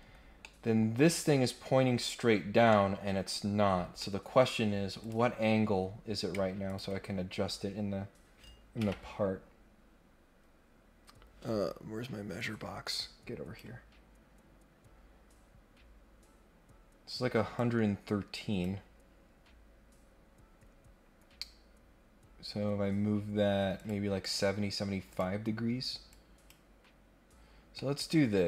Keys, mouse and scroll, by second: 0.4 middle click, 2.7 middle click, 3.3-4.0 scroll down 2, 4.0 middle click, 5.0 click, 5.3 scroll up 1, 5.5-6.2 scroll down 1, 6.6 ctrl+click, 12.3-13.6 drag, 17.5-18.6 drag, 23.7 click, 24.2 click, 25.1 click, 26.1 click, 27.7-28.4 middle drag.